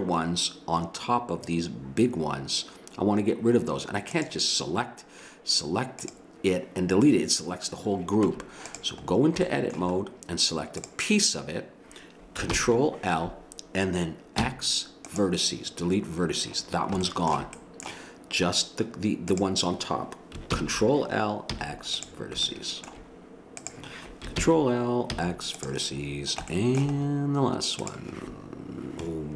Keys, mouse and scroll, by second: 4.1-7.9 drag, 8.2 Tab, 10.0 click, 11.4-12.5 drag, 12.5 ctrl+l, 14.4 x, 16.2 middle click, 17.0 middle click, 17.7 middle click, 19.3-20.5 drag, 20.5 ctrl+l, 21.5 x, 22.7 middle click, 23.6 click, 24.4 ctrl+l, 25.1 x, 26.5 middle click, 27.8 click, 27.9 right click, 28.0 click.